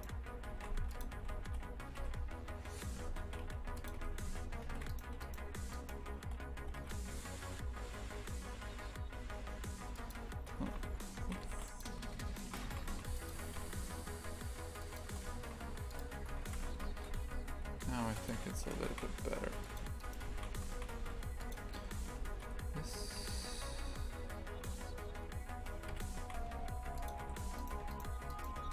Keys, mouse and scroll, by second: 0.5 shift+f, 1.2 s, 2.9 Tab, 3.2 shift+f, 3.9 2, 4.2 a, 4.6 a, 4.9 alt+shift+right click, 5.2-6.6 alt+shift+right drag, 6.6 g, 10.7 ctrl+z, 11.2 shift+f, 12.3 shift+right click, 12.6 shift+f, 13.3 g, 15.4 shift+f, 16.1 Tab, 16.4 shift+f, 18.3 a, 18.9 shift+f, 20.0 right click, 20.3 shift+f, 22.2 s, 23.7 Tab, 25.9 KP_Divide, 26.2 shift+f, 27.2 3, 27.5 right click, 28.3 shift+right click.